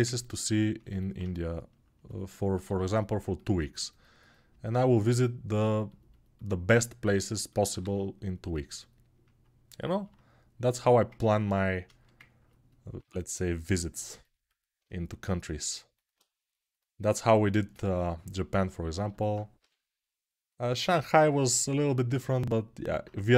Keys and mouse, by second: 2.4 g, 7.6 2, 19.3 g.